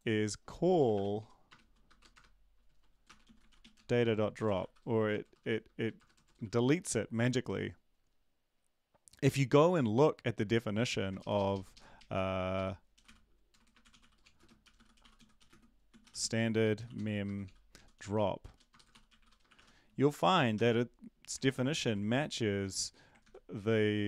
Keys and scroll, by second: 0.9-6.5 typing, 11.2 ctrl+shift+Left, 11.3 ctrl+shift+Left, 11.5 ctrl+shift+Left, 11.9 ctrl+shift+Left, 11.9 ctrl+shift+Right, 12.9 shift+Right, 14.0-20.5 typing, 21.4 ctrl+z, 21.8 ctrl+s, 23.2 ctrl+z, 23.3 ctrl+x, 24.0 Up.